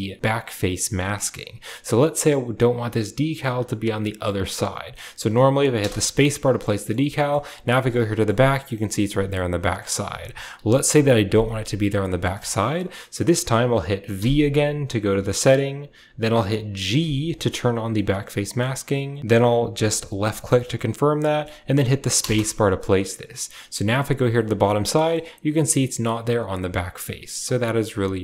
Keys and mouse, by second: 2.9-28.2 middle drag, 10.8 KP_7.